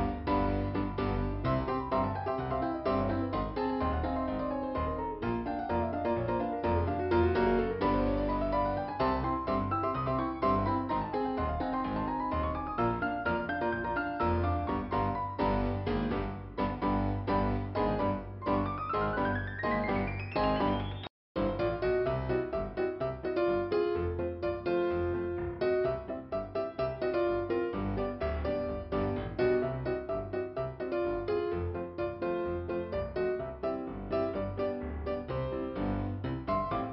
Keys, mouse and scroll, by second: 1.6 middle click, 2.9 click, 5.9 scroll up 1, 11.6 click, 14.4 click, 18.4 click, 19.9 click, 21.0 click, 22.0 click, 23.1 click, 23.9 scroll down 1, 26.0 click, 28.3 click, 30.4 scroll up 2, 32.1-32.4 scroll down 1, 34.1 click, 36.7 click, 36.8 click.